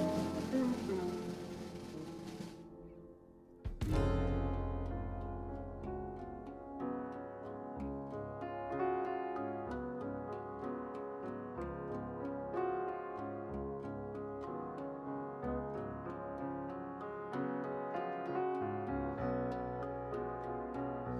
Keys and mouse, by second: 0.7-6.1 right drag, 1.0 click, 2.2 x, 4.5-6.1 drag, 6.1 shift+a, 8.4-9.5 middle drag, 9.5 right click, 18.0 right click, 19.2 alt+m, 20.4 alt+m.